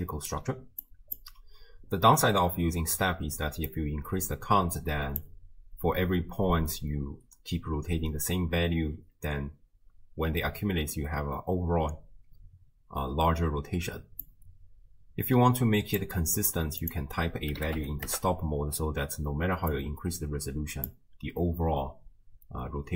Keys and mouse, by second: 0.0 right click, 0.3 d, 0.8 click, 2.1 d, 2.6 d, 2.7 d, 3.7-5.2 drag, 3.7 d, 8.1-9.1 d, 9.3 d, 14.2-16.0 drag, 16.8-18.1 drag, 19.7-20.9 drag.